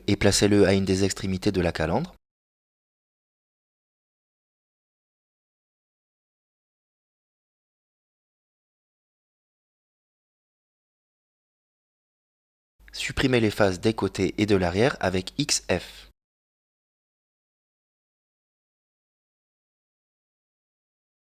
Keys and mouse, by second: 1.2 s, 4.6 s, 8.7 s, 11.2 s, 13.7 KP_Decimal, 15.2 click, 15.8 middle click, 16.6 right click, 17.7 ctrl+Tab, 18.8 right click, 19.6 middle click, 20.9 shift+right click.